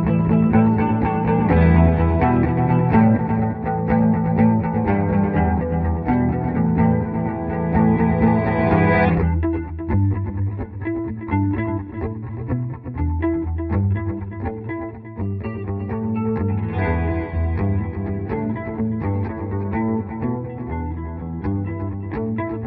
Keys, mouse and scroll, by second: 0.1 ctrl+g, 0.6 F2, 0.8-2.6 drag, 2.6-8.2 right drag, 8.2 F3, 9.2 shift+click, 13.2 click, 16.2 F3, 17.3-18.6 drag, 18.6 ctrl+g, 18.9 F2, 19.3-22.6 drag.